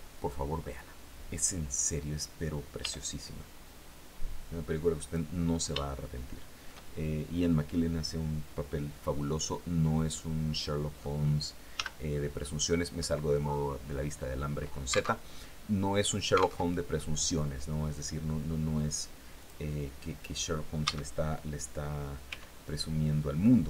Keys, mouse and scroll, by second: 2.2 r, 4.4 click, 5.3-6.3 shift+middle drag, 9.2 scroll down 1, 9.6-10.6 middle drag, 11.2 z, 12.1-12.4 scroll up 2, 14.6 alt+Tab, 16.0 alt+Tab, 18.8 click, 20.2 a, 21.7 c, 23.1 Escape.